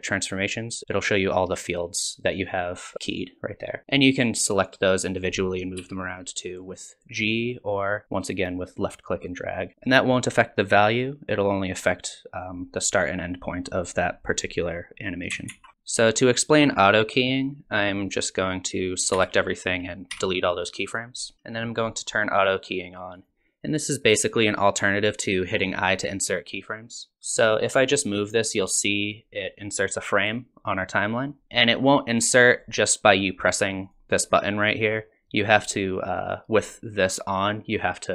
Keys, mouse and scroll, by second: 0.4 click, 0.8 scroll down 2, 4.5 click, 5.8 g, 8.0 click, 11.7 click, 15.5 ctrl+z, 19.2 a, 20.1 x, 21.3 shift+Left, 23.2 click, 27.1 ctrl+z, 28.1 click, 31.4 ctrl+z, 32.6 click, 33.9 click.